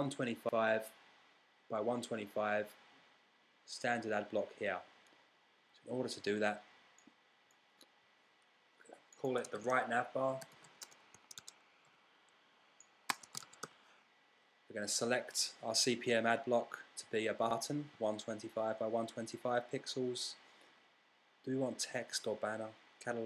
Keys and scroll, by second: 10.2-14.7 typing.